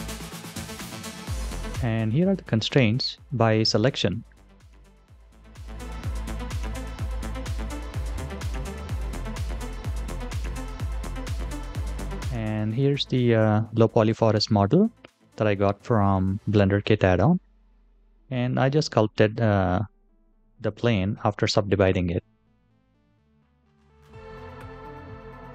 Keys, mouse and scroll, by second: 2.4-8.2 middle drag, 24.4-25.5 drag.